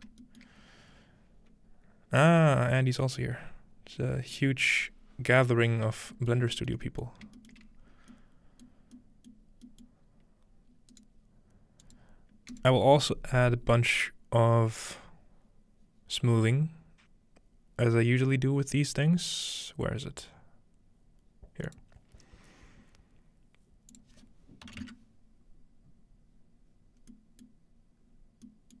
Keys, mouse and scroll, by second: 0.5-4.0 shift+middle drag, 6.3 shift+middle click, 7.1 shift+middle click, 7.6 shift+middle click, 7.6-9.3 shift+scroll up 1, 10.1-10.9 scroll down 1, 10.9 right click, 10.9-11.7 scroll down 1, 11.9 click, 12.5 click, 21.7 click, 23.9 click, 27.8 middle click, 28.0-28.8 scroll down 1.